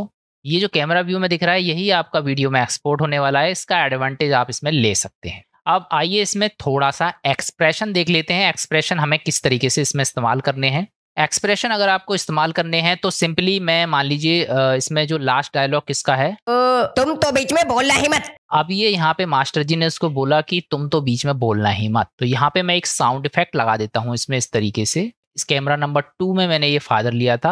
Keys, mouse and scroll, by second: 0.2 Tab, 0.2 space, 9.7-11.3 middle drag, 11.8 click, 12.5 click, 16.1 click, 16.4 space, 20.6 middle click, 21.6 middle click, 22.4-25.2 drag.